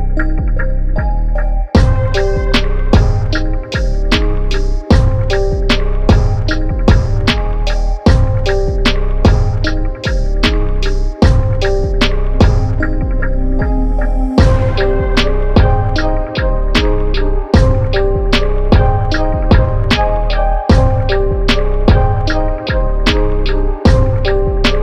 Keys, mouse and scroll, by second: 0.1 ctrl+Num_Lock, 0.1 -, 0.5 space, 1.0 space, 1.4 click, 1.5 space, 2.0 click, 5.6 click, 7.6 click, 12.2 click, 14.0 click, 14.1 ctrl+=, 14.3 typing, 16.0 click, 16.6 KP_2, 16.8 KP_0, 18.1 click, 19.2 KP_Subtract, 19.5 KP_1, 19.7 KP_5, 20.0 KP_0, 20.3 Tab, 22.0 click, 22.7 KP_1, 22.9 KP_0, 23.1 Tab, 24.2 click.